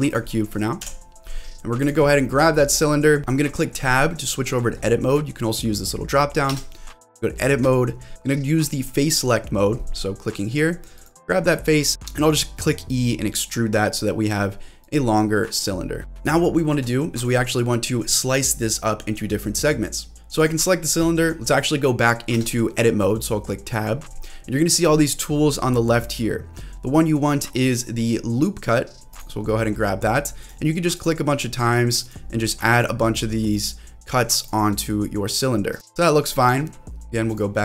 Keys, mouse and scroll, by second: 0.1 click, 0.8 Delete, 1.8 click, 2.2 middle click, 3.0 scroll up 1, 6.6 Tab, 7.1 middle click, 8.1 click, 10.9 click, 11.4-11.9 scroll down 2, 11.9 e, 14.8 click, 15.1-15.6 scroll down 2, 15.6 middle click, 16.0 scroll up 2, 16.4 shift+middle click, 20.1 Tab, 20.1 click, 20.1 q, 20.4 click, 22.4 Tab, 29.1 click, 30.4 click, 31.5-32.8 drag, 33.0-34.5 drag, 34.7-35.9 drag, 35.9 middle click, 37.3 click.